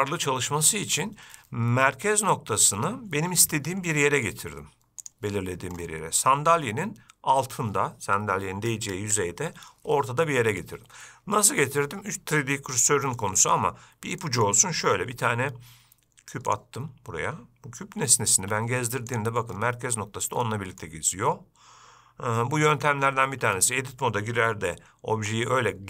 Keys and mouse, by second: 4.1-4.5 middle drag, 10.8-11.8 middle drag, 13.0-13.4 shift+middle drag, 14.4 shift+middle drag, 15.4 shift+a, 18.6 g, 20.7 middle click, 23.6 Tab, 25.4 g.